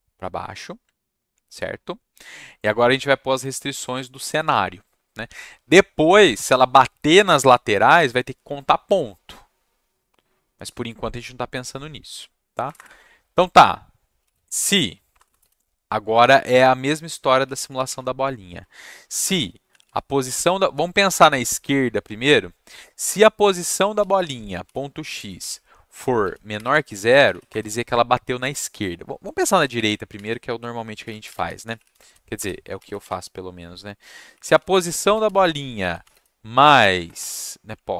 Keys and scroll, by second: 12.6 Return, 12.7 Return, 13.9-15.3 typing, 17.1-20.3 typing, 24.0-27.3 typing, 27.5 Return, 29.5 Down, 29.7 shift+Up, 29.8 shift+Up, 30.7-33.0 typing, 34.0-37.1 typing, 37.7 Left.